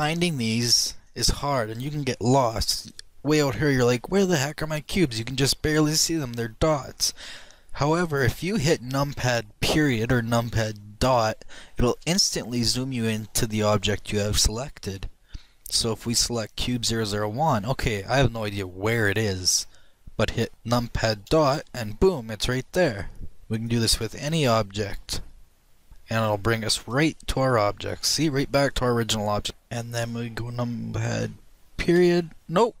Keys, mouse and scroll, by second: 6.5-7.7 middle drag, 9.4-9.7 scroll down 1, 9.7-12.8 middle drag, 12.8 KP_Decimal, 15.1-17.9 middle drag, 17.5 click, 22.1 KP_Decimal, 23.2-25.4 middle drag, 24.4 click, 24.9 KP_Decimal, 25.7 KP_Decimal, 27.2-28.9 drag, 27.8 KP_Decimal, 29.5 click, 29.5 KP_Decimal, 29.5-31.2 middle drag, 31.3-32.8 middle drag.